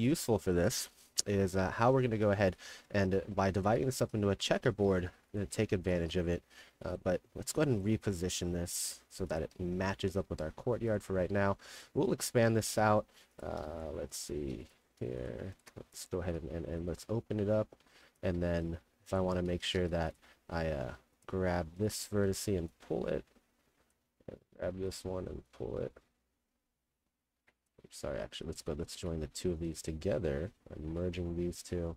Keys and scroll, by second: 0.0-0.6 typing, 2.6-7.4 typing, 10.3 d, 12.0 w, 13.1 2, 16.0 t, 16.3 d, 18.4-20.3 typing, 22.2 s, 29.0 2, 30.9 m, 31.6 2.